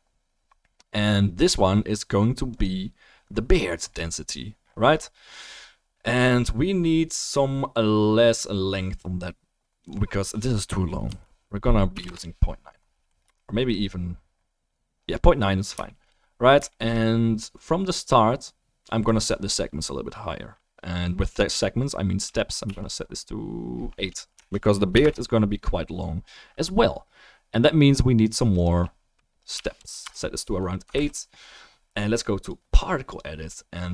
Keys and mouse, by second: 2.5 click, 2.8-13.3 middle drag, 30.9 ctrl+s.